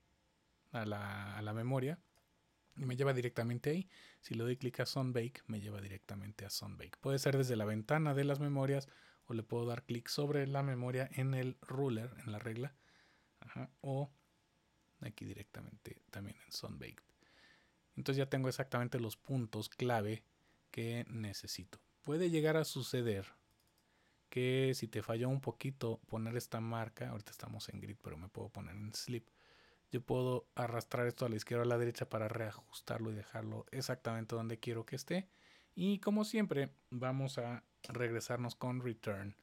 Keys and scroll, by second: 10.9 typing, 37.8 Return.